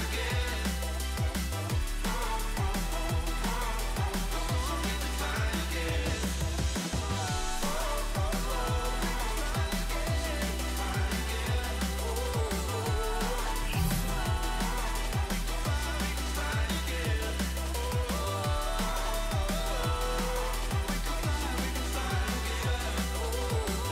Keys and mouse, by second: 1.6 click, 2.2 click, 5.4 click, 6.8 Return, 7.3 click, 8.6 space, 8.6 click, 9.0 click, 11.4 click, 14.6 click, 15.8 space, 16.0 click, 18.8 space, 18.9 click, 19.6 space, 20.6 space, 20.7 click, 22.1 click, 22.4 shift+click.